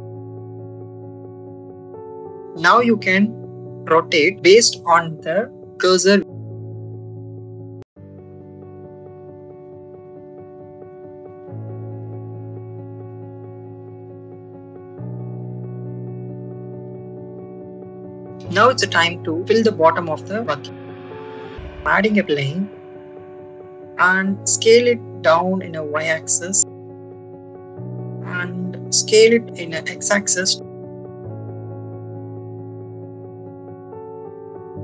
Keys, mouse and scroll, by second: 0.2 shift+middle click, 0.7 r, 1.3 shift+middle click, 2.0 middle click, 3.3 r, 3.3 y, 3.3 x, 6.4 click, 7.3 shift+middle click, 9.0-10.3 middle drag, 10.6 click, 10.9 click, 11.5 click, 12.9 shift+middle click, 13.7-15.8 middle drag, 16.3 middle click, 18.6-19.7 middle drag, 19.9 shift+middle click, 20.6 shift+middle click, 21.2 middle click, 22.2 shift+a, 25.6 y, 28.0 click, 28.6-31.7 drag, 31.7 x, 33.8 click.